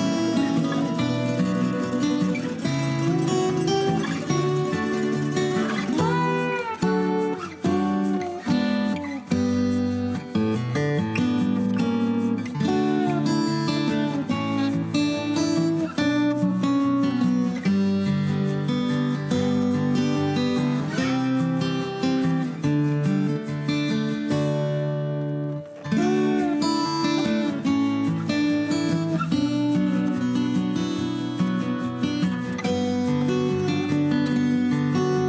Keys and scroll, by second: 14.7 q, 19.0 shift+s.